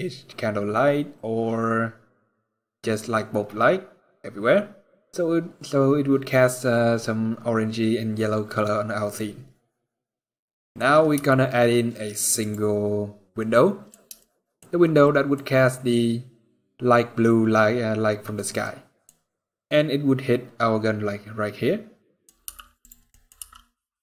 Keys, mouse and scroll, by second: 9.9 middle click, 10.9 g, 13.1 middle click, 13.9 shift+middle click, 14.7 middle click, 18.3 middle click, 18.9 scroll up 1, 21.4 scroll up 1, 21.8 middle click, 22.2 g, 22.8 middle click, 23.1 r.